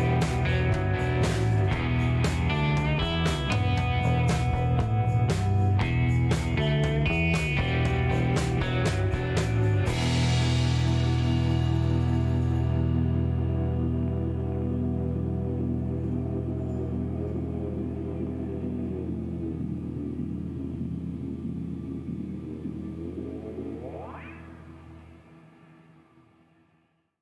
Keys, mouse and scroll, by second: 1.4 click, 4.5 click, 5.4-5.9 scroll down 2, 6.3 scroll down 1, 7.6 click, 8.0 space, 10.9 click, 12.2 scroll up 4, 14.8 click, 15.1 space, 15.7 scroll up 2, 16.2 shift+right click, 17.3 shift+middle click, 17.5 shift+scroll up 2, 19.2 middle click, 19.6 scroll up 2, 21.1 click, 21.9 click, 22.5 middle click, 23.4 scroll up 1, 27.1 click.